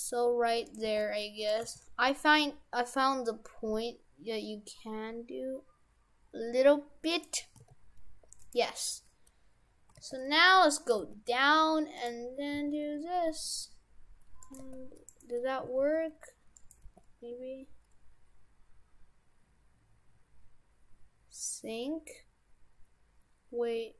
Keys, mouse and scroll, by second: 0.9 g, 1.7 g, 7.6 s, 9.9 g, 11.0 g, 12.5 s, 14.6 g, 15.7 s, 16.9 g.